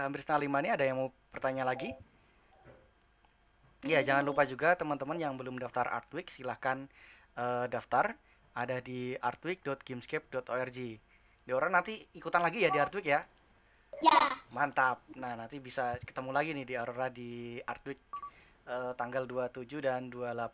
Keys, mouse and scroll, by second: 0.7-20.5 middle drag.